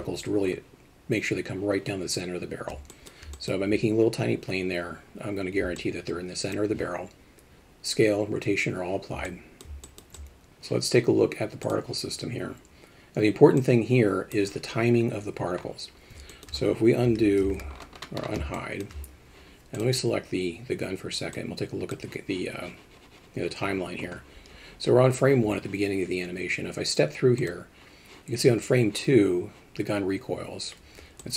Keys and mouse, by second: 2.9 alt+shift+middle drag, 3.3 alt+middle click, 5.8 middle click, 9.3 alt+middle click, 9.8 alt+shift+middle click, 10.1 alt+shift+middle click, 13.6 click, 16.3 alt+shift+middle drag, 17.0 alt+h, 17.5 alt+a, 18.6 alt+shift+middle drag, 19.8 click, 21.4 click, 27.4 click, 31.2-31.3 alt+shift+middle drag.